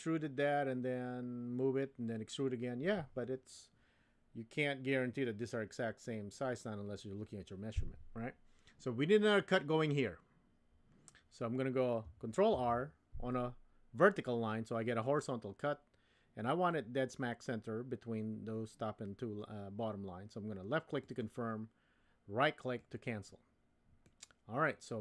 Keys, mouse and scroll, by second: 12.5 ctrl+r, 24.1-25.0 drag.